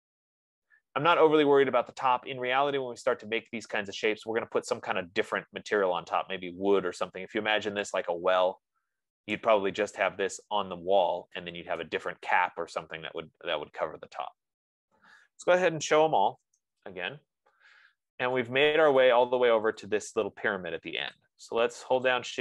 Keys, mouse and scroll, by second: 1.5-6.5 right drag, 9.6 right click, 12.3 right click, 16.3-17.3 typing, 18.1-18.8 scroll, 19.6 right click, 20.4 click, 21.8 click.